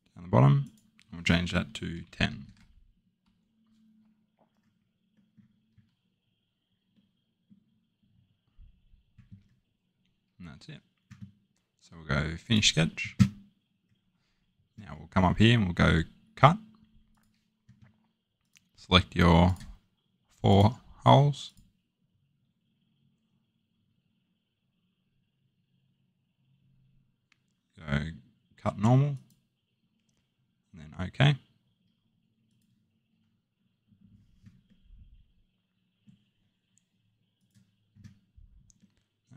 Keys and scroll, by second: 1.9-2.3 typing, 3.2 Tab.